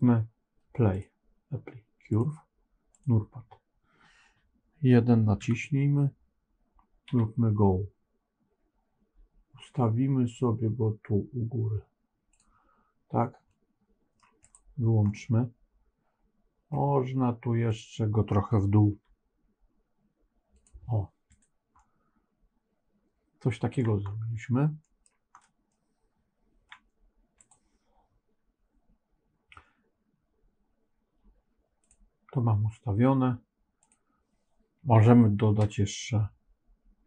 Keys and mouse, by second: 2.1 click, 5.3 KP_1, 7.0 g, 13.5 middle click, 14.3 click, 15.0-16.6 middle drag, 18.8 g, 21.2 click, 21.7-23.7 middle drag, 24.7 middle click, 25.6-26.6 middle drag, 33.7 click, 35.7-37.0 drag.